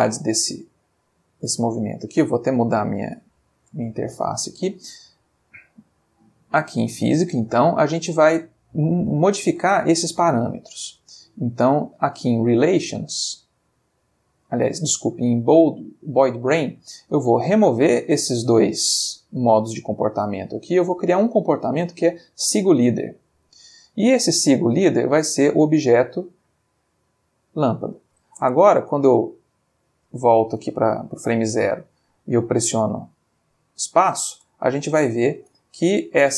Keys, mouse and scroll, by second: 1.0 click, 2.0-2.8 ctrl+middle drag, 3.2 ctrl+click, 4.7 click, 6.8 click, 7.2 middle click, 9.2 shift+middle click, 10.2 ctrl+middle click, 10.6 ctrl+middle click, 12.5 click, 13.0 middle click, 13.8 click, 14.3 middle click, 17.6 click, 18.0 click, 20.8 click, 22.4 click, 25.6 click, 27.5 click, 28.4 space, 29.5 Escape, 30.3-31.1 drag, 31.3 space, 34.9 shift+middle click.